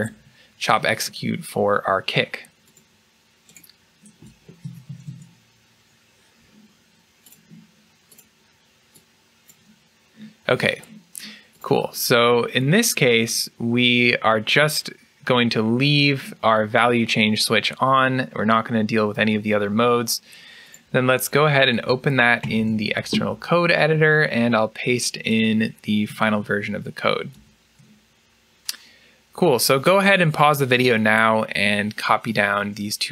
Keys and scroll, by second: 4.5 Tab, 6.3 Tab, 22.3 ctrl+e, 26.2 ctrl+a, 27.2 ctrl+v.